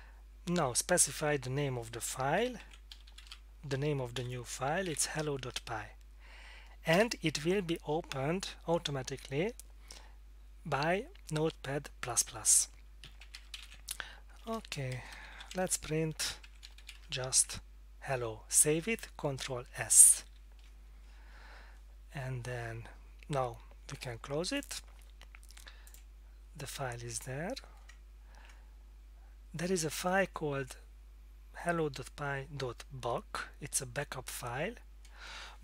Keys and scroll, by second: 2.3-5.4 typing, 6.9 Return, 13.0-17.4 typing, 14.9 Left, 20.2 ctrl+s.